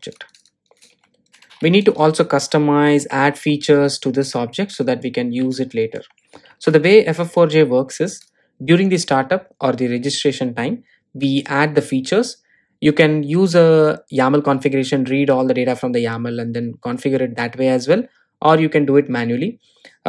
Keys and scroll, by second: 0.1 Return.